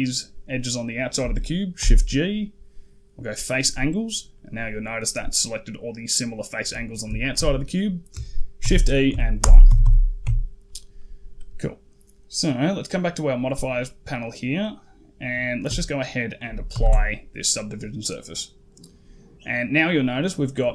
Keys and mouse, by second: 1.6 shift+g, 4.2 middle click, 4.9 click, 6.7 click, 7.0 shift+click, 8.4 shift+e, 9.5 a, 9.7 a, 10.1 Tab, 10.8 middle drag, 13.7 middle click, 16.6 ctrl+a, 19.3 middle click.